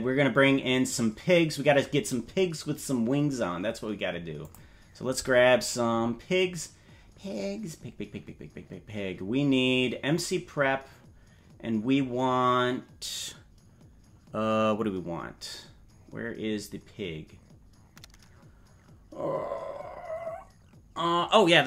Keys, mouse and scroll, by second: 4.4 click, 16.0 scroll down 4.